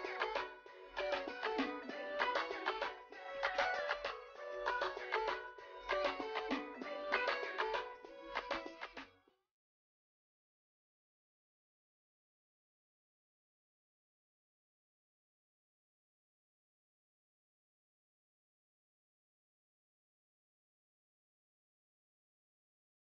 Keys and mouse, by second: 3.4 click, 5.9 click, 13.1 shift+click, 21.5 shift+click.